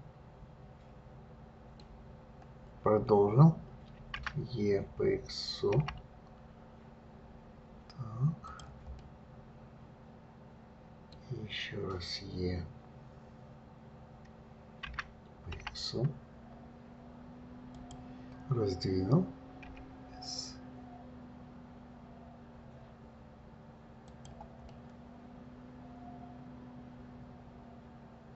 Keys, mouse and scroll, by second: 0.2-3.3 middle drag, 4.5 e, 9.3-12.4 middle drag, 15.2 e, 20.0 s, 25.0-28.1 middle drag.